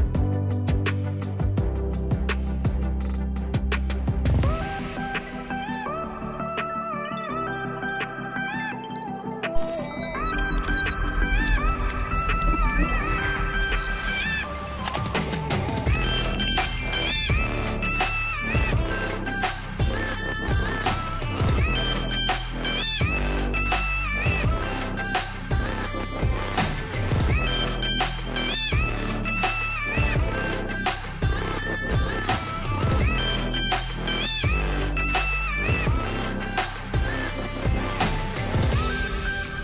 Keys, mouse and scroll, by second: 6.2 click, 7.8 Delete, 8.8 click, 10.2 click, 15.5-25.3 drag, 25.7 click, 36.0 click, 38.6 ctrl+z, 39.5 ctrl+z.